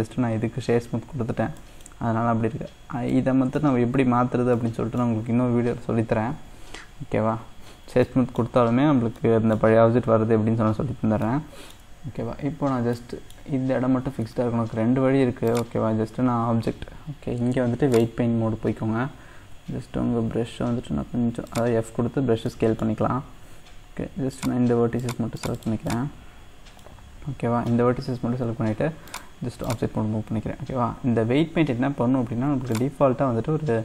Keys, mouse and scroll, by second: 0.9-1.6 scroll up 1, 1.6 middle click, 2.2-3.1 scroll up 1, 3.1-4.1 middle drag, 4.1-4.5 scroll up 1, 4.5-7.0 middle drag, 7.0-8.0 scroll down 1, 8.0 middle click, 8.8-9.2 scroll up 1, 9.2 middle click, 10.0-11.3 scroll up 1, 11.3-12.7 shift+middle drag, 12.7 scroll down 2, 12.9-15.5 middle drag, 15.5-18.5 drag, 18.7-19.3 scroll up 1, 19.3 scroll up 1, 19.5 f, 22.0-22.5 scroll up 2, 22.5-24.3 middle drag, 24.3-26.3 drag, 26.3-26.8 scroll down 1, 26.8-29.1 middle drag, 29.1-33.8 drag.